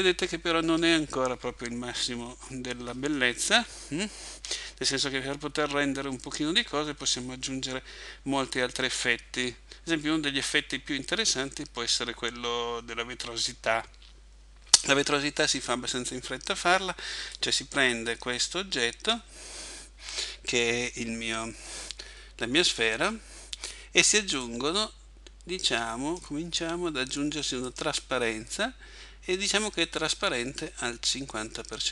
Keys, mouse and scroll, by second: 0.7 Escape, 12.4-14.2 scroll up 3, 17.4 right click, 24.4 click, 27.7 click.